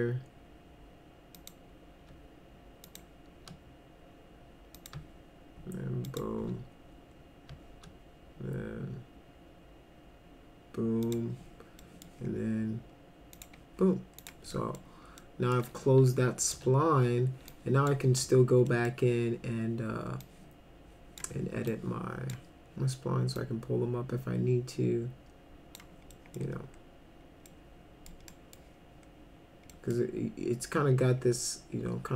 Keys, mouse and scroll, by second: 1.4 click, 2.9 shift+click, 4.8 click, 6.1 shift+click, 11.0 click, 11.8 middle click, 13.4 click, 14.2 click, 14.5 middle click, 15.2 middle click, 16.5 1, 17.5 click, 18.1 w, 18.7 middle click, 20.2 click, 21.7 click, 23.4-25.8 drag, 26.1 middle click, 27.5 middle click, 28.3 middle click, 29.7 middle drag.